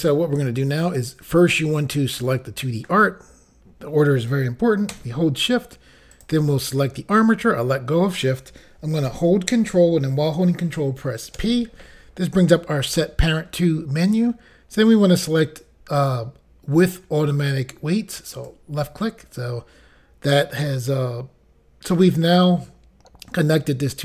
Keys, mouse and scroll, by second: 0.8 click, 0.9 click, 6.1 shift+click, 11.4 ctrl+p, 18.3 click, 18.5 click.